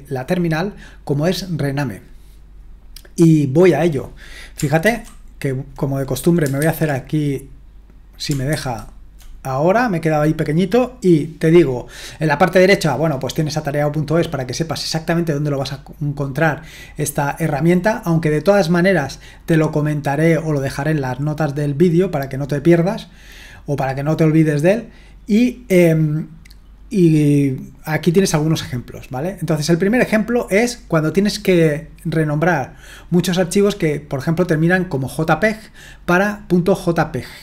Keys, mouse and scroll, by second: 4.8 ctrl+2, 6.6 super+1, 8.5 ctrl+1, 23.3-24.1 scroll down 1, 24.1-25.8 scroll down 1, 25.8-26.2 scroll down 1, 26.2-26.9 scroll up 1, 26.9-27.4 scroll down 1, 27.4-28.0 scroll down 1, 28.0-30.1 scroll down 1, 30.1-35.4 scroll down 1, 35.4-37.4 scroll down 1.